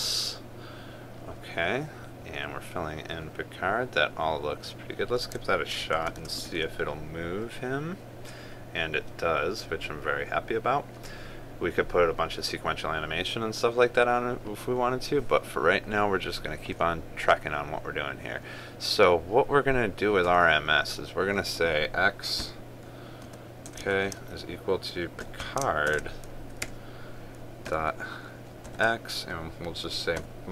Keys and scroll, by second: 6.6 ctrl+s, 7.2 ctrl+r, 26.6 ctrl+space.